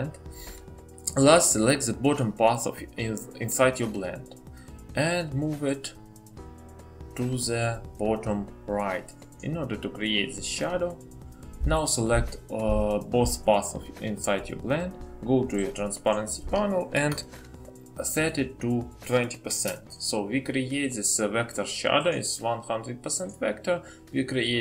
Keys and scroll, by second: 19.8-20.5 typing.